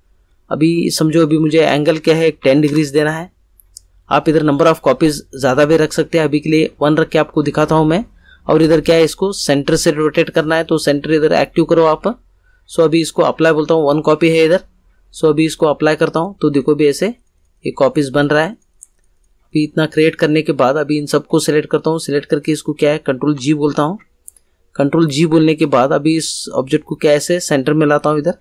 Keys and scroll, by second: 2.4 1, 2.6 0, 23.8 ctrl+g.